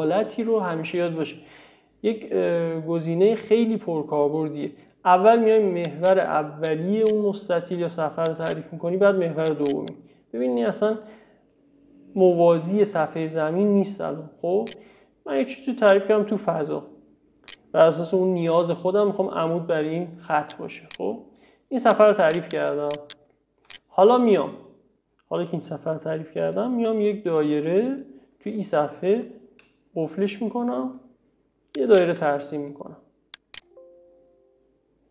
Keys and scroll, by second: 26.5 c.